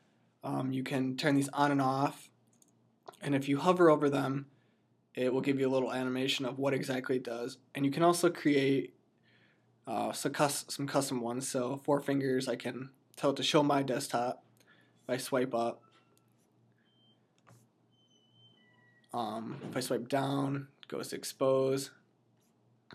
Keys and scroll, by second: 14.9 F11, 19.7 F9, 21.2 F11, 22.3 F9.